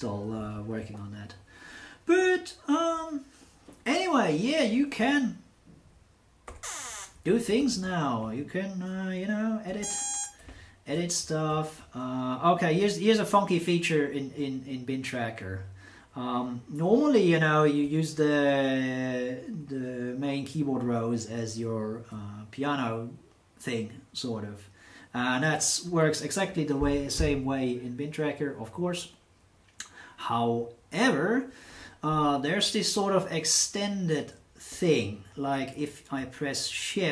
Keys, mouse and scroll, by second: 6.4 1, 7.3 Down, 7.5 Down, 7.7 Right, 9.6 b, 10.4 Down.